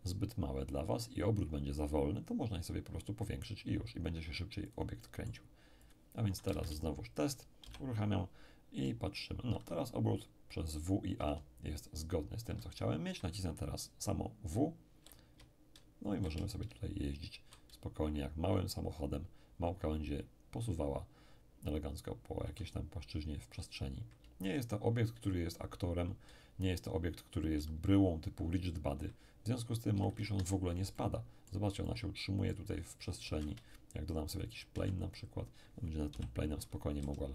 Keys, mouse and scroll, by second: 4.7-6.9 drag, 5.0-6.4 middle drag, 6.4 shift+right click, 6.5 shift+middle click, 6.5 space, 7.7 p, 8.8 d, 9.0 d, 9.6 a, 9.9 a, 11.3 d, 11.6 d, 12.6 a, 12.8 a, 14.5-17.9 typing, 22.6 a, 22.8 a, 24.2 d, 24.4 d, 26.3 w, 26.5 w, 27.8 a, 28.1 a, 29.9 d, 30.4 Escape, 30.9 click, 31.0 middle click, 31.0-32.8 drag, 32.8-33.8 scroll up 1, 33.2 shift+a, 34.3 shift+click, 34.7 shift+s, 36.1-37.3 typing.